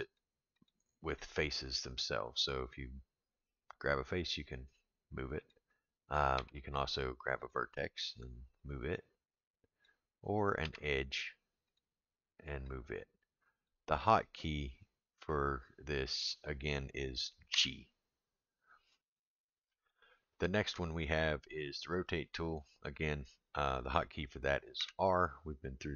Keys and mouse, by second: 0.0 click, 0.6 click, 1.2 click, 2.7-5.5 drag, 6.3 1, 7.4 click, 8.6-9.8 drag, 10.6 2, 11.6 click, 12.7-13.7 drag, 17.5 g, 22.2 click, 24.8 r.